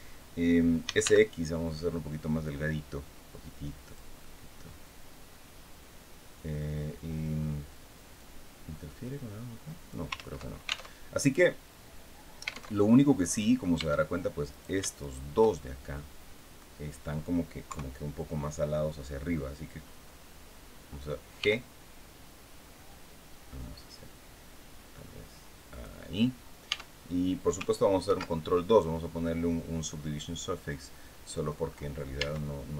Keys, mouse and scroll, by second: 0.5 s, 0.7 x, 3.5 click, 3.9-6.5 middle drag, 7.9-9.8 drag, 9.8 ctrl+z, 10.6 ctrl+alt+Tab, 12.5 alt+Tab, 12.9 middle click, 12.9 click, 13.5 Tab, 14.2 right click, 14.7 shift+right click, 15.3-16.4 shift+middle drag, 17.4 KP_3, 21.0 g, 22.3 scroll down 2, 23.8 scroll up 2, 25.4 click, 26.4 Tab, 27.7 ctrl+2, 29.5-31.3 drag, 31.3-31.7 scroll up 2, 31.9 Tab.